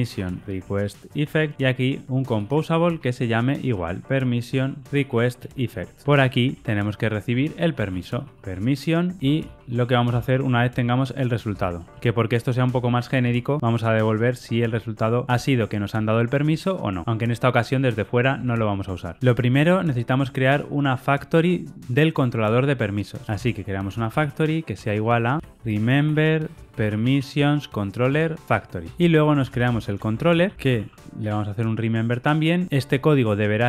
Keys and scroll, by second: 2.9 Return, 6.2 ctrl+shift+Left, 6.9 ctrl+shift+Right, 9.2 Tab, 13.2 Tab, 18.4 ctrl+alt+o, 28.1 Tab.